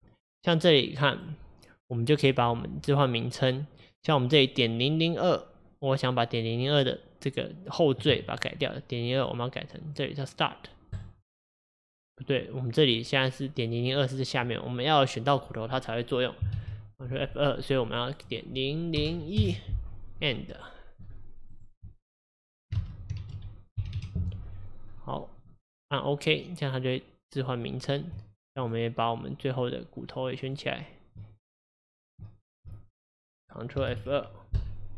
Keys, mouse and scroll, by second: 27.5 click, 28.6 shift+click, 29.5 shift+click, 30.5 shift+click, 32.5 shift+click.